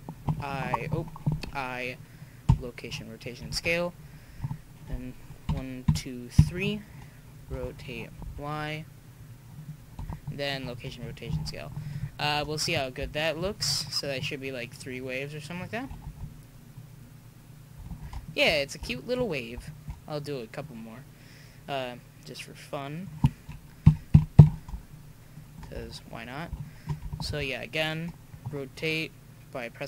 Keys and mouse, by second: 0.3 u, 1.3 i, 5.4 Right, 5.9 Right, 7.5 r, 10.1 i, 14.7-16.1 drag, 16.1 alt+a, 17.9 alt+a, 23.8 Right, 24.1 Right, 27.1 r.